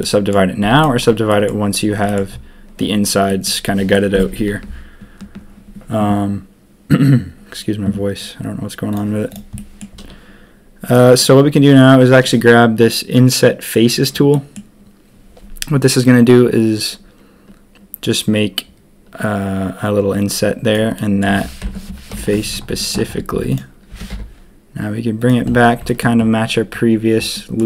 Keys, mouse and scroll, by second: 0.0 click, 0.6 z, 1.2 click, 2.0 click, 3.2 middle click, 8.9 click, 9.3 click, 9.5 middle click, 10.8 click, 14.3 middle click, 20.9 click, 22.1 ctrl+KP_3, 22.8 shift+click, 22.9 shift+middle click, 23.3 z, 23.9 g, 27.3 click, 27.3 middle click.